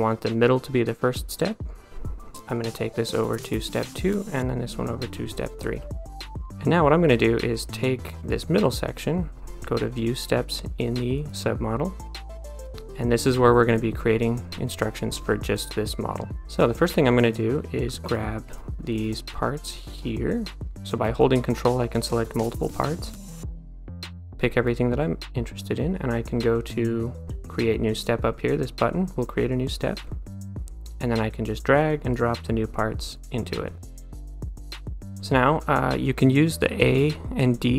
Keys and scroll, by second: 37.6 a.